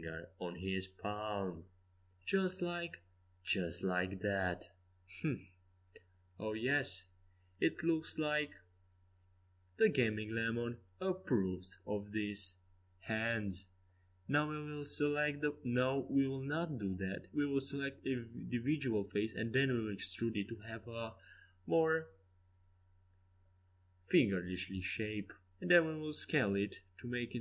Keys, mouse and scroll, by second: 1.5-3.3 drag, 3.9 r, 5.7-11.5 middle drag, 11.7-13.4 drag, 13.4-17.5 right drag, 16.0 e, 18.2 ctrl+z, 19.1 click, 19.3-21.2 right drag, 20.1 e, 21.5 s, 22.8-24.7 drag, 23.3 e, 24.5 s, 25.9-27.4 drag.